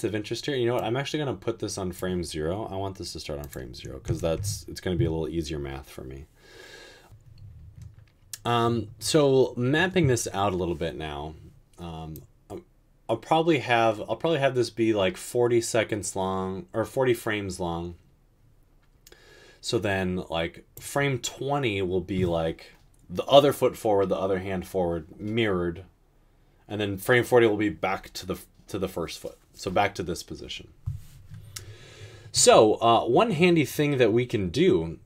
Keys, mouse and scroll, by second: 4.1 typing, 4.3 Return.